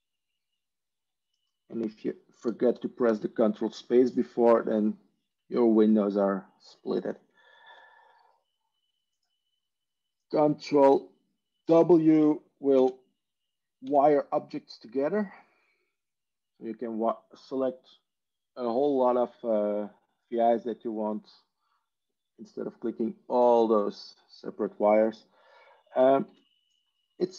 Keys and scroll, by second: 13.8 ctrl+space, 13.8 ctrl+w, 26.3 ctrl+z.